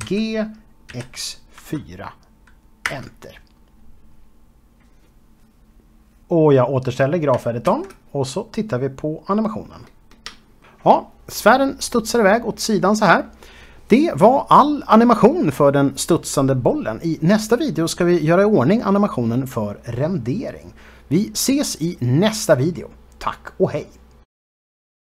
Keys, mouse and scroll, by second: 2.6 Return, 7.6 ctrl+space, 8.5 space.